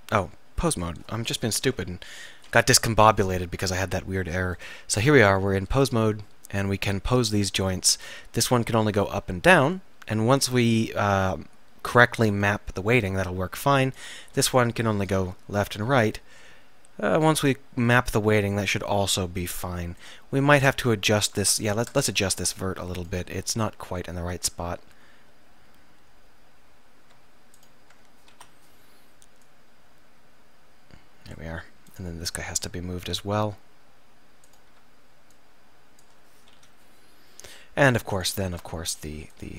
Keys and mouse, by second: 0.3 right click, 2.8 KP_3, 4.6-6.0 drag, 8.3 r, 9.6 middle click, 9.8 middle click, 10.1 middle click, 10.4 middle click, 11.6 middle click, 13.1-15.9 drag, 14.9 KP_7, 15.9 r, 18.4 middle click, 21.5 Tab, 22.0 Tab, 22.4 Tab, 23.9 middle click, 25.1 middle click, 25.5 middle click, 25.6 middle click, 25.9 middle click, 26.4 middle click, 28.4 KP_7, 32.5 middle click, 33.0 middle click, 36.6 KP_7, 38.6 Tab.